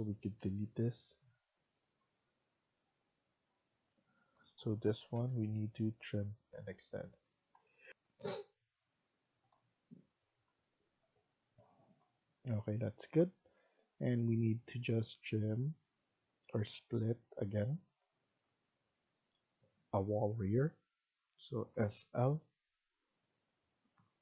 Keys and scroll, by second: 0.3 Delete, 3.8 Escape, 4.1 Escape, 4.7-5.6 typing, 7.1 Escape, 7.8 F1, 9.6 F1, 21.6-22.1 typing.